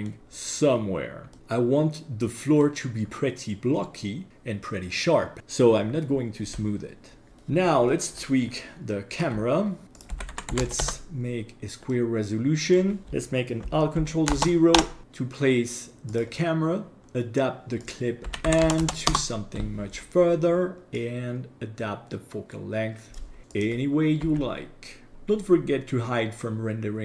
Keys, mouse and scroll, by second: 0.2 scroll down 2, 1.3-2.7 middle drag, 1.4 click, 7.3 click, 8.1-9.1 scroll up 3, 9.1 click, 10.0 click, 11.9-12.8 middle drag, 13.0 scroll down 2, 16.1 click, 17.0 click, 17.8-19.1 drag, 18.8 KP_0, 21.0-23.2 drag, 23.4 g, 23.5 click, 24.2 g, 25.1 h.